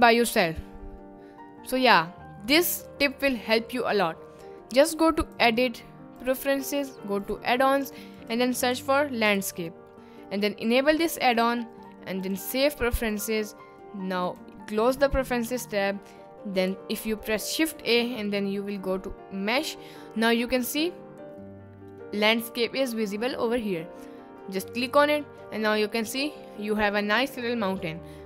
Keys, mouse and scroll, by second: 5.2-6.5 drag, 17.7 shift+a, 26.2 middle drag, 27.1 middle click, 27.5 middle click.